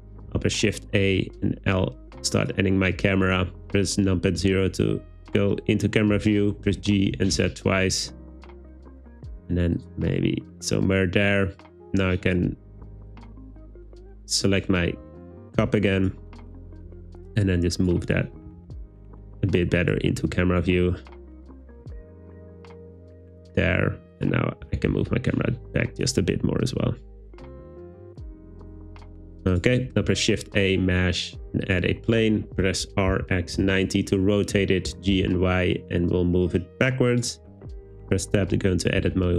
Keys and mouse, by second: 0.3 shift+a, 6.7 g, 7.2 z, 7.4 z, 9.8 click, 12.9 w, 13.8 click, 15.0 click, 16.9 g, 17.8 click, 18.5 r, 18.8 r, 20.2 g, 23.3 click, 24.2 click, 24.7 g, 24.7 z, 25.0 z, 29.6 click, 29.9 shift+a, 32.5 r, 33.1 x, 33.5 9, 33.6 0, 33.8 Return, 34.9 g, 35.2 y, 37.2 click, 37.4 Tab, 39.0 a.